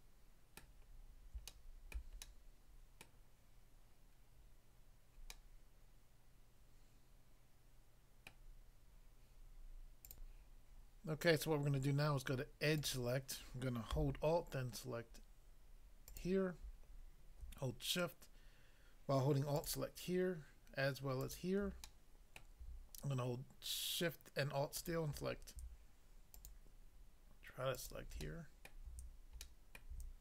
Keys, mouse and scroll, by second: 0.6 middle click, 1.0-1.5 scroll up 1, 1.5 shift+middle click, 2.0 shift+middle click, 2.2 shift+middle click, 5.3 middle click, 8.3 middle click, 10.1 click, 12.8 click, 16.0 alt+click, 16.2 alt+click, 21.8 middle click, 22.4 middle click, 24.7 alt+click, 26.4 alt+click, 27.7 alt+click, 28.3 middle click, 28.7 middle click, 29.4 middle click.